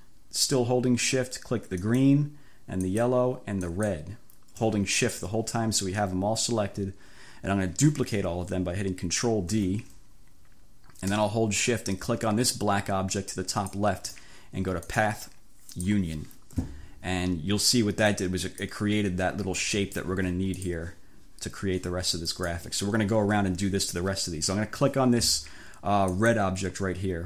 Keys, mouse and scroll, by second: 1.9 shift+click, 2.9 shift+click, 3.8 shift+click, 9.6 ctrl+d, 13.5 shift+click, 14.9 click, 15.8 click, 18.2 click, 20.2 ctrl+z, 20.9 ctrl+click, 22.4 click, 26.1 click.